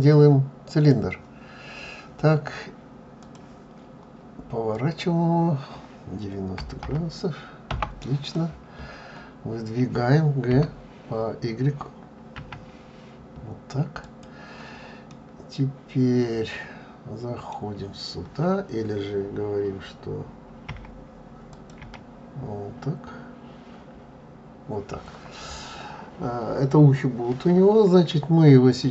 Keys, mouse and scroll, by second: 3.3 l, 4.8 click, 15.3 middle click.